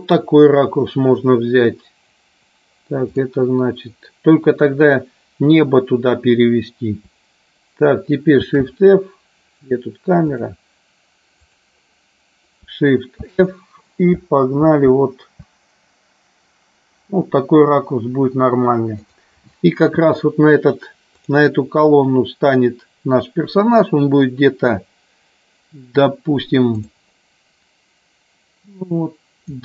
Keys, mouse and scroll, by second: 8.5 shift+f, 13.2 shift+f, 15.0 Left, 15.5 Left, 19.1 click, 26.7 click.